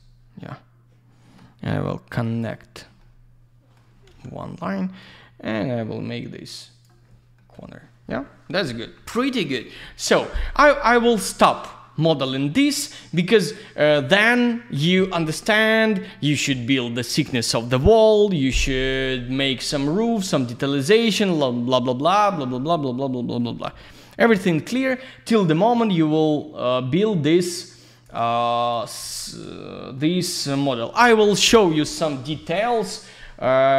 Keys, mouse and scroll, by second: 2.2 click, 3.0 alt+middle click, 5.0 click, 7.3 middle click, 7.5 F3, 22.4 alt+middle click, 23.5 middle click, 24.3 alt+middle click, 26.0 scroll down 1, 26.1 click, 28.4 click, 28.6 click, 29.0 ctrl+a, 29.8 middle click.